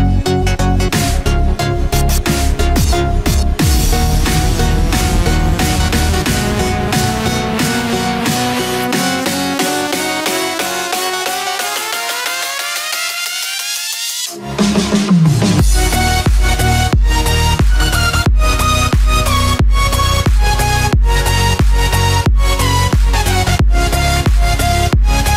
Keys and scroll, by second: 16.2 ctrl+-, 22.1 ctrl+-, 22.8 ctrl+=.